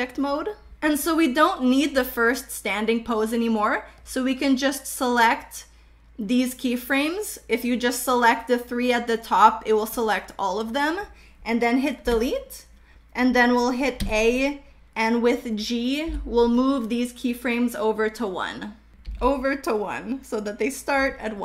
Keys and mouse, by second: 2.0 click, 4.1-6.1 drag, 8.4-9.6 drag, 12.2 Delete, 14.1 a, 16.2 g, 19.1 g.